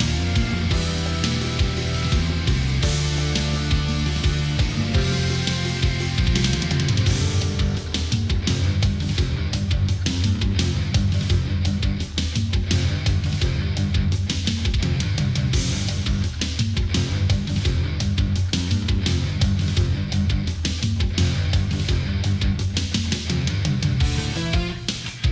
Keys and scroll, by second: 2.8 Delete, 3.1 ctrl+-, 5.0 ctrl+0, 7.3 ctrl+=, 8.2 Delete, 9.1 ctrl+a, 9.4 ctrl+0, 10.1 ctrl+a, 17.8 ctrl+z, 21.3 ctrl+=.